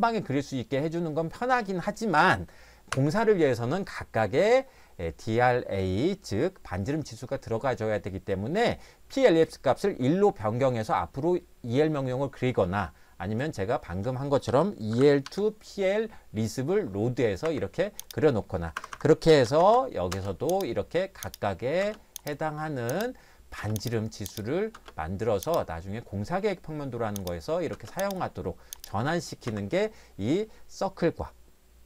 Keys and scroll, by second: 2.9 Escape, 14.2-15.8 typing, 17.5 Escape, 18.9 Escape, 19.1-20.1 typing, 21.8 space, 23.6 space, 24.7 space, 27.7 space, 29.5 Escape.